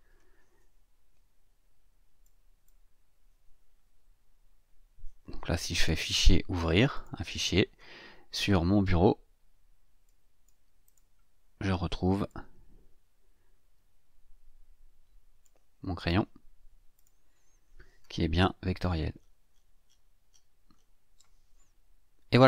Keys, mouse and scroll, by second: 2.2 click, 5.8 click, 6.9 click, 10.0 click, 10.8 click, 12.3-15.6 drag, 16.0 click, 17.0 click, 18.8-19.5 ctrl+scroll up 2, 19.6 ctrl+scroll down 2, 19.8-20.1 ctrl+scroll up 2, 20.3 ctrl+scroll down 2, 20.7 ctrl+scroll up 2.